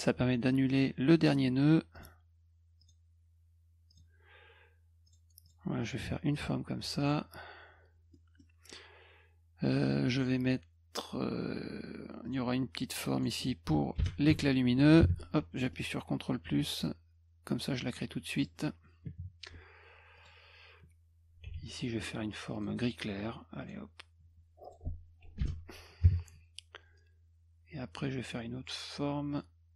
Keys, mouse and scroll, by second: 1.9 click, 2.8 click, 3.9 click, 5.1 click, 5.4 click, 7.0 click, 8.1 middle click, 12.3 click, 13.1 click, 14.0 Return, 15.6 scroll up 4, 16.8 click, 18.0 click, 20.2 click, 21.5 b, 22.5 click, 23.6 click, 24.6 click, 25.4 Return, 29.3 click.